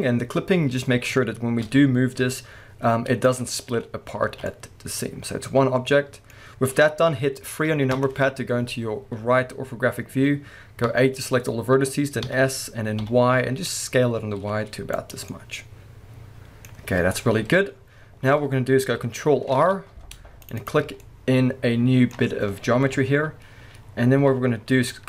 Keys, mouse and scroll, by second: 0.3-1.2 scroll up 1, 1.2 scroll down 1, 1.6 a, 3.4 right click, 4.0 scroll down 1, 4.2 alt+a, 4.5-5.6 middle drag, 7.9-9.0 middle drag, 7.9 KP_3, 9.0-10.9 scroll up 2, 10.9 a, 15.1 click, 15.3-17.3 middle drag, 17.3 KP_1, 18.4-19.5 scroll up 2, 19.5 ctrl+r, 20.7 click, 21.0-21.9 scroll up 1, 22.8-25.0 middle drag, 22.8 KP_1, 24.7 z.